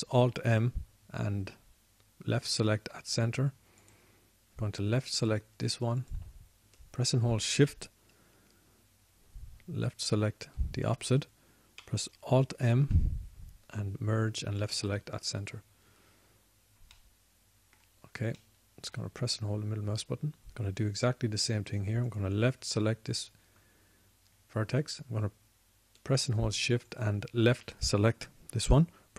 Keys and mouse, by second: 0.6 alt+m, 14.0 alt+m, 16.2 alt+m, 17.5-18.6 middle drag.